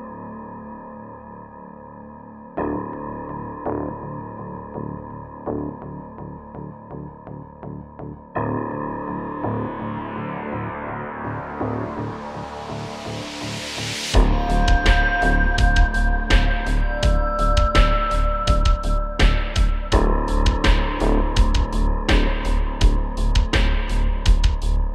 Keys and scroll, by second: 1.5 space, 2.3 BackSpace, 3.3 space, 6.3 space, 7.6 space, 13.6 typing, 15.0-15.9 typing, 18.9-20.1 typing, 21.8 space.